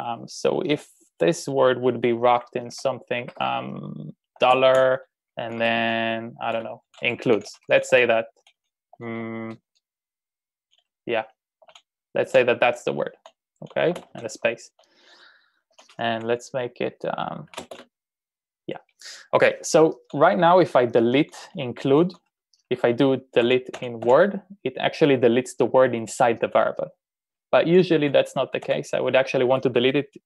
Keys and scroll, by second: 2.0-8.2 typing, 11.3-13.5 typing, 15.8-18.7 typing, 19.9 typing, 20.9-22.0 typing, 23.4-24.2 typing, 28.7 u.